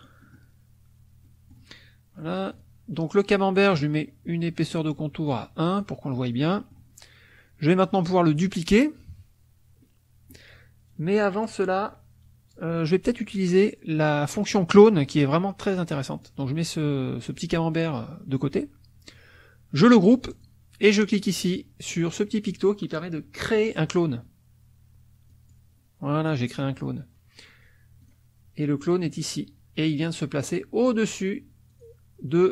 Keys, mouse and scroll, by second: 1.3 middle click, 2.5 click, 4.7 right click, 5.7 click, 6.4 middle click, 9.1 KP_Subtract, 9.8 middle click, 14.0 middle click, 16.3-17.4 drag, 20.3 click, 25.3 click, 28.0 click, 31.7 click.